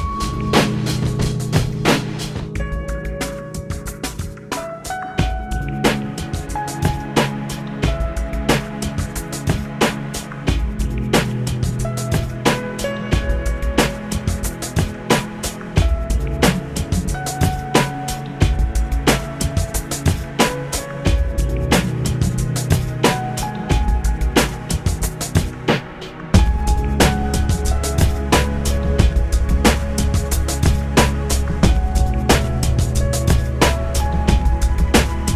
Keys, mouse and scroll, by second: 3.6 alt+p, 6.4 F9, 14.3 F9, 17.0 ctrl+alt+p, 19.2 click, 20.8 l, 24.2 p, 26.9 click, 29.8 middle click, 31.5 l, 33.6 p, 34.9 click.